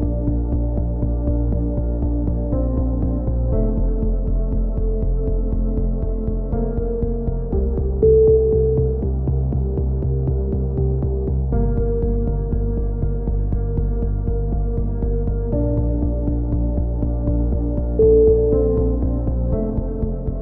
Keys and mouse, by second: 0.2 z, 1.2 middle click, 2.1-4.0 drag, 2.6 c, 4.0 right click, 4.4 t, 5.2-9.4 drag, 9.9 t, 10.2 z, 11.4 click, 11.4 z, 12.4 z, 12.9 c, 15.1-16.2 right drag, 15.9 c, 16.6 right click, 16.8 x, 19.0 ctrl+r.